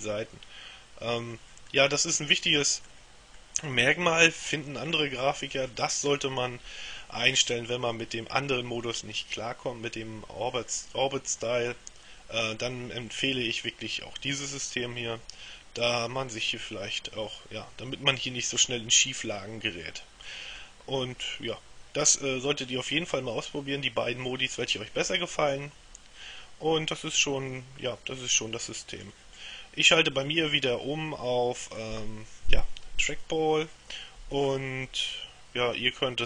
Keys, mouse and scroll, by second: 1.7 middle click, 3.5-5.5 middle drag, 12.5-16.9 middle drag, 20.7 middle click, 23.1 middle click, 31.7 click, 33.2 click.